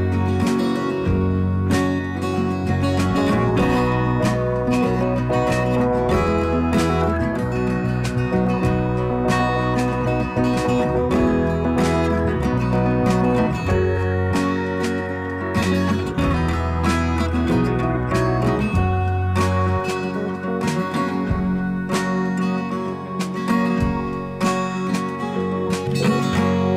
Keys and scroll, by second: 13.1 Delete, 15.6 Delete, 16.8 b.